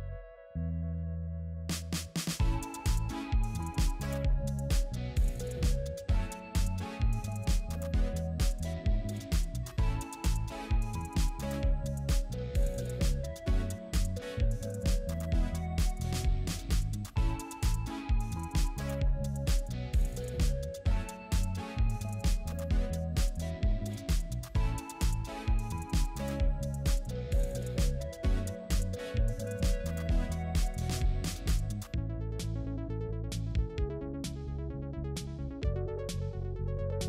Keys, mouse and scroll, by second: 0.2 alt+click, 6.8 space, 9.1 alt+click, 15.0 alt+click, 16.3 alt+click, 23.8 alt+click, 24.5 space, 26.7 alt+click, 29.8 alt+click, 31.4 alt+click, 33.0 alt+click.